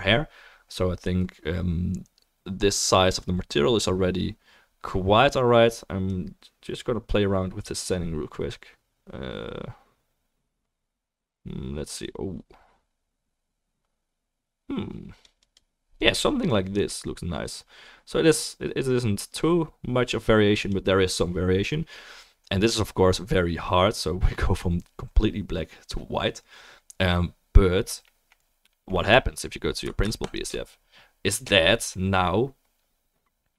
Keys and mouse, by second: 15.5 click, 15.5-19.8 middle drag, 15.5-19.8 right drag, 16.5-19.8 drag, 30.4-33.5 ctrl+shift+right drag.